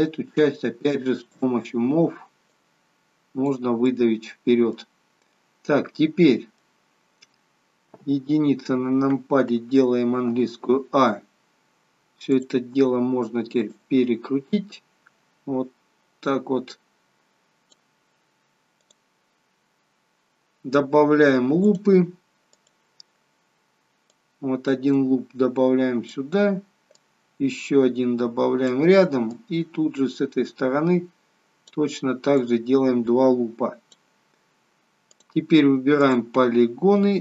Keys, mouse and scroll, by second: 1.3 click, 2.5 click, 3.8 middle click, 5.2 middle click, 6.8 scroll down 3, 7.8 KP_1, 10.1 a, 12.3 click, 13.6 click, 18.8 click, 21.6 click, 22.4 click, 24.1 click, 27.1 click, 29.4 click, 32.3 click, 35.1 click, 35.9 click, 36.5-37.0 scroll up 5.